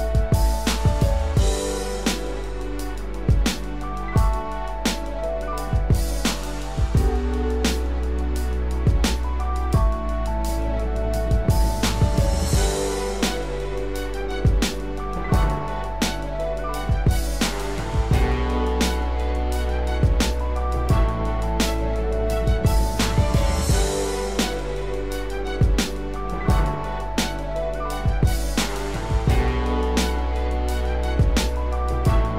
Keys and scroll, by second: 11.5 ctrl+z, 12.3 ctrl+z.